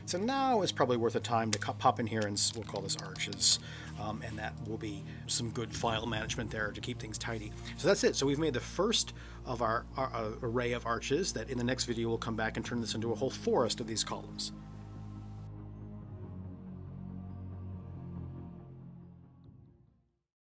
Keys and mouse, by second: 0.3-4.6 drag, 9.1-9.5 middle drag.